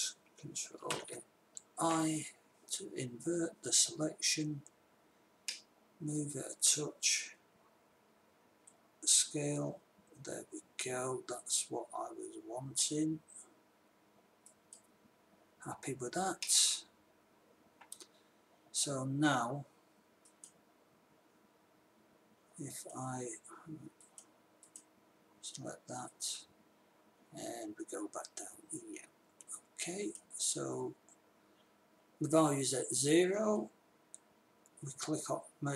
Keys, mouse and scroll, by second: 1.3 ctrl+i, 5.9-7.4 drag, 8.8 s, 16.9-18.6 middle drag, 20.7 click, 23.2-24.3 drag, 24.8 click, 26.8-28.3 drag, 33.6 click.